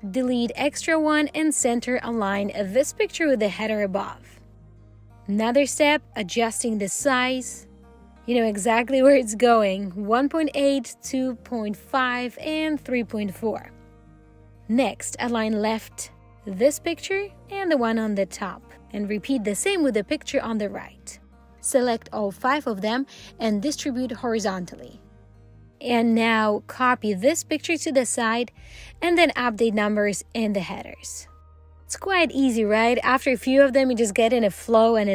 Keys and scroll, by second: 3.1 alt+l, 4.7 alt+c, 16.6 alt+l, 24.7 alt+h.